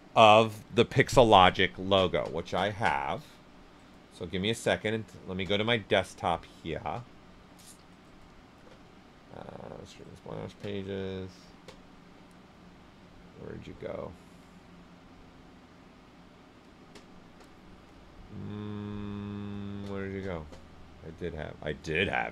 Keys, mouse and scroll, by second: 2.3 click, 3.7 click, 7.8 click, 21.6 click.